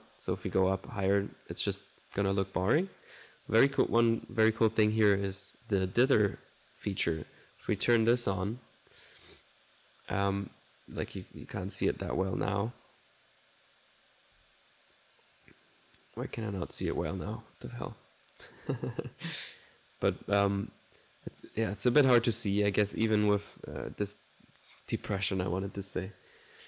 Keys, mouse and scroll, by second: 0.5-1.7 drag, 4.6-5.7 drag, 7.9 click, 11.1-14.3 drag, 14.4 1, 14.4 click, 16.2 click, 16.9 click, 19.1-21.6 drag.